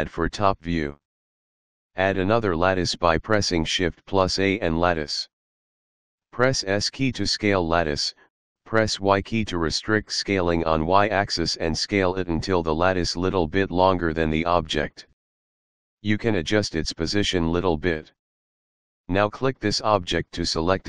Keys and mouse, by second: 2.2 shift+a, 3.9 click, 5.5 s, 8.1 y, 12.9 click, 16.1 click, 20.2 click.